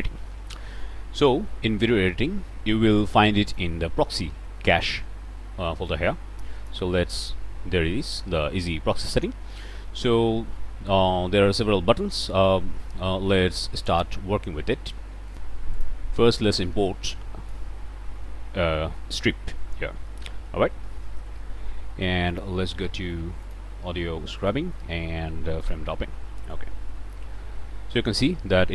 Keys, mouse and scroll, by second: 3.3 click, 5.8-6.8 drag, 7.1 click, 13.9 click, 15.3 click, 15.8 click, 16.3 click, 18.4-18.9 drag, 18.9-19.9 scroll down 1, 20.1 middle click, 20.4 click, 21.2 middle click, 22.3 click, 23.4 click, 24.4 click, 25.6 click, 26.5-28.7 drag.